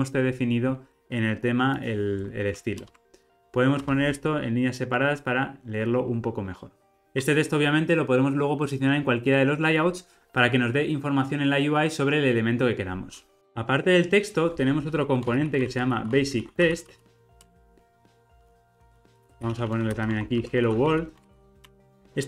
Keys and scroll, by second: 2.8 alt+Return, 4.4 alt+Return, 17.5 Return, 21.9 super+b.